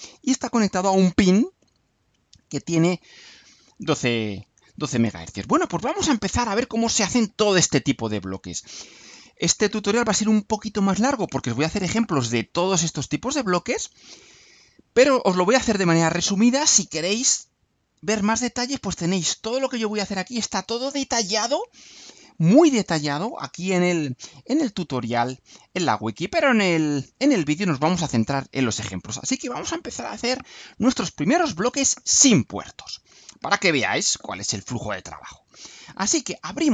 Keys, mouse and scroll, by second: 17.8 click, 18.8-20.7 scroll down 6, 21.3-23.3 scroll down 4, 24.2-25.0 scroll up 4, 26.8 click.